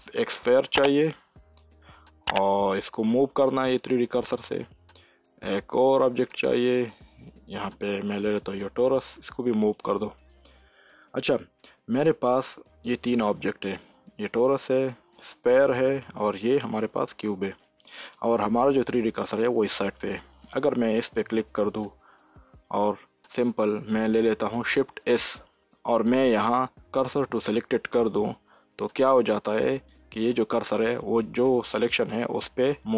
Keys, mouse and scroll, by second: 0.8-5.7 drag, 5.7 shift+a, 8.1 click, 16.7 click, 18.6-20.9 drag, 25.1 shift+s.